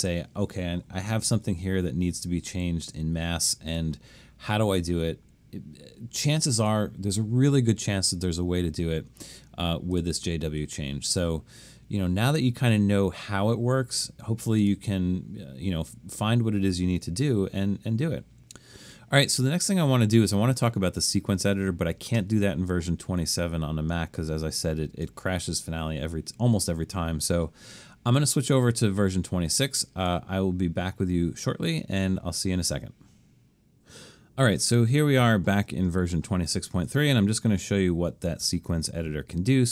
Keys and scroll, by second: 1.5 super+-, 1.9 super+-, 3.2 super+-.